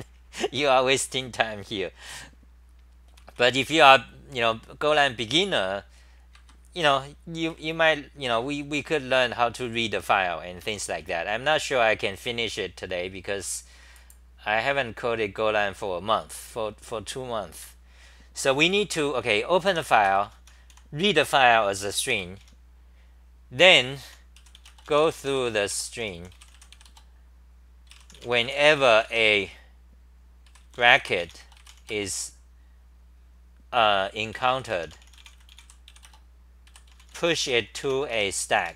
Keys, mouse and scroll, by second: 3.1 c, 3.3 c, 6.3 ctrl+g, 6.8 t, 7.5 r, 8.9 r, 9.2 2, 10.6 ctrl+g, 11.0 t, 17.6 ctrl+g, 18.7-21.2 typing, 22.1 ctrl+g, 22.4 t, 24.0 u.